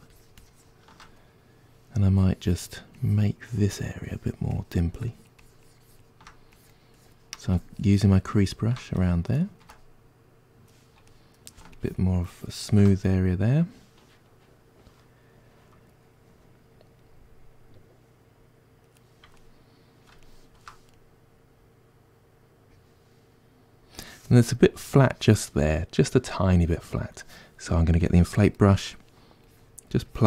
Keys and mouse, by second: 9.1-11.8 ctrl+middle drag, 11.8-12.9 shift+drag, 12.9-28.1 middle drag, 28.1 click, 28.6 middle click, 29.5-30.2 drag.